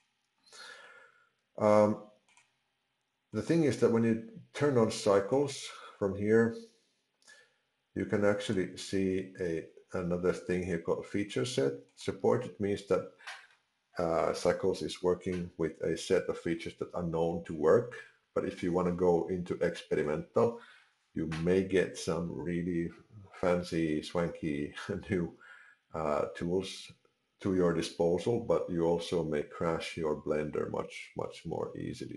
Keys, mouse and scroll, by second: 2.3 click, 3.4 click, 8.4 click, 11.9 click.